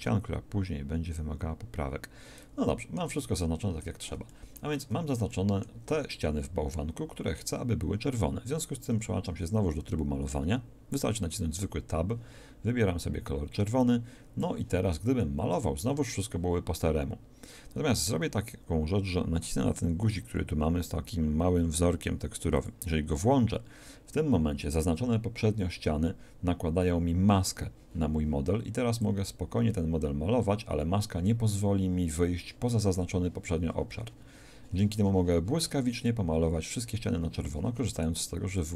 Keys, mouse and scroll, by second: 1.8 middle click, 2.7 middle click, 3.8-5.9 shift+middle drag, 4.8 shift+z, 8.9 Tab, 13.0-15.1 drag, 22.7-24.5 drag, 29.0-31.2 drag, 32.7-33.9 drag.